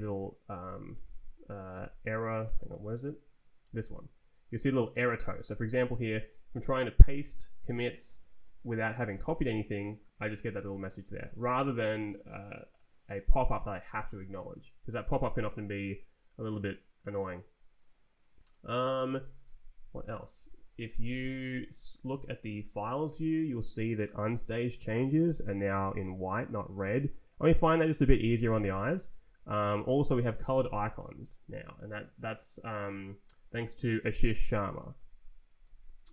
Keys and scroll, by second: 0.9 Escape, 1.7 c, 2.5 Escape, 3.6 shift+v, 9.1 shift+v, 19.4 ctrl+t, 19.9 Down, 20.5 Down, 21.0 g, 21.2 Return, 21.8 Left, 22.4 Down, 25.7 Down, 26.0 Up, 26.8 Down, 28.1-30.2 typing, 28.2 Down, 28.5 Down, 28.9 Up, 29.6 Down, 29.9 Down, 35.6 Down.